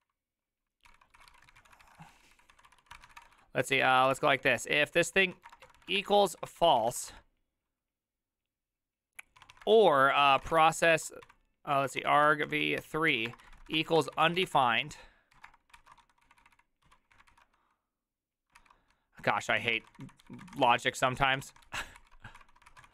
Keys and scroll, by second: 0.0-7.5 typing, 0.9 ctrl+c, 9.4-17.7 typing, 18.6 ctrl+c, 19.4-22.9 typing, 22.4 ctrl+v.